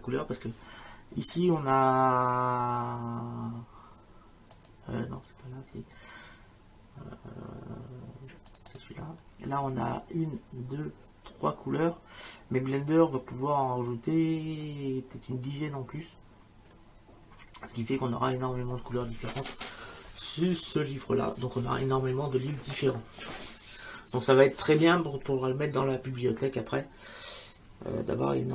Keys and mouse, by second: 4.6 click, 8.5 click.